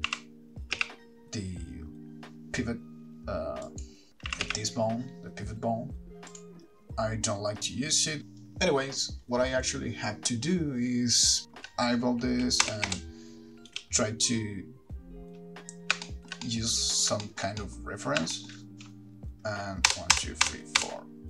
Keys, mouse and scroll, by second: 0.1 click, 0.1 r, 0.3 r, 4.0 right click, 4.6 r, 6.6 right click, 8.2 ctrl+z, 8.4 click, 9.8 Right, 10.6 KP_7, 11.5 shift+middle click, 12.9 Right, 13.2 Right, 13.9 Left, 16.3 shift+middle click, 16.7 middle click, 17.5 shift+middle click, 17.8 middle click, 18.0-18.6 scroll up 3, 18.6 shift+middle click, 20.1 Right, 20.4 Right, 20.7 Right, 21.0 Right.